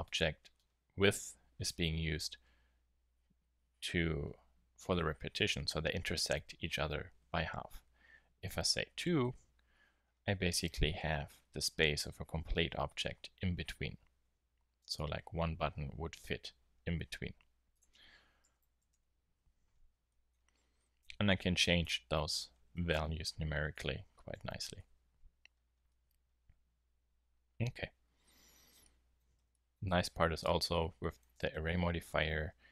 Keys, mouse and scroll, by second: 0.3-2.6 middle drag, 5.3 middle click, 6.3 z, 14.1 z, 14.7 z, 19.5-21.0 middle drag, 19.8 z, 25.9-28.8 middle drag, 30.2 Tab, 32.0 a, 32.2 a.